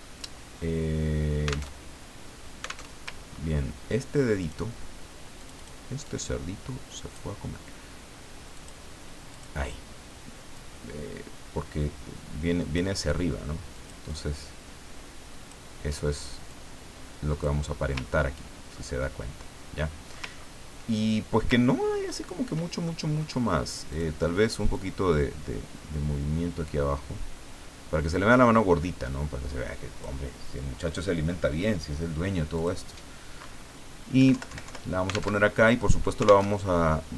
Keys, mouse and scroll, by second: 1.7 alt+Tab, 2.9 alt+Tab, 3.4-3.8 ctrl+scroll up 2, 4.4 click, 5.4 click, 6.0-7.4 drag, 8.5 click, 9.3 click, 10.5-12.9 drag, 13.7-15.6 drag, 16.5-17.7 drag, 18.1-18.6 ctrl+scroll down 2, 19.8 middle click, 20.4 ctrl+scroll down 2, 21.9-22.4 ctrl+scroll up 2, 22.9 ctrl+click, 23.9 click, 24.7-30.3 drag, 32.5 click, 34.2 Down, 35.3 alt+Tab, 36.5 alt+Tab.